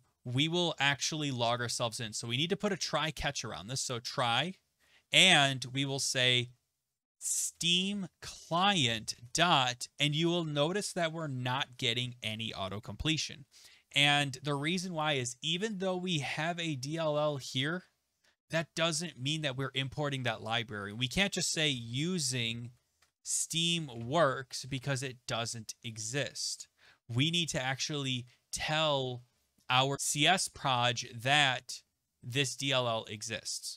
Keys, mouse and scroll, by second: 1.6-2.3 typing, 3.5 Down, 3.6 Down, 3.9 Tab, 7.0-9.6 typing, 15.7 click, 21.4-25.1 typing.